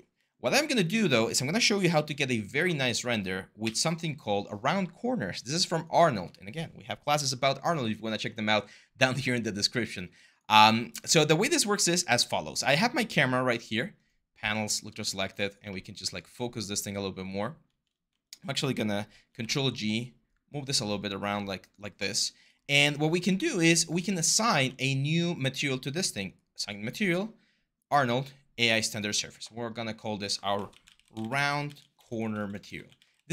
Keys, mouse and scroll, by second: 1.7 h, 3.4 Delete, 18.9 ctrl+g, 19.2 e, 23.7 q, 30.4 Caps_Lock, 30.5-33.3 typing.